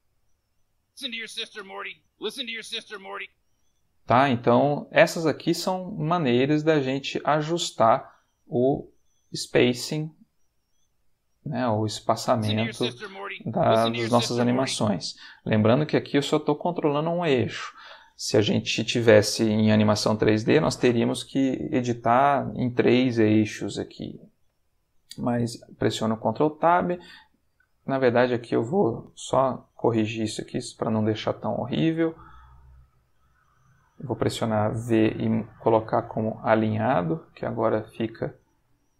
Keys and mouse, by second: 0.7 space, 3.1 space, 3.9 click, 4.2 g, 6.1 click, 6.9 click, 7.3 g, 9.2 click, 10.1 click, 10.2 g, 10.9 click, 11.7 click, 12.2 space, 14.6 space, 27.6 ctrl+click, 29.5 click, 29.7 g, 30.7 click, 31.4 click, 31.5 g, 33.3 click, 33.8 click, 34.7 v, 36.0 click, 37.3 click, 37.5 g, 38.4 click.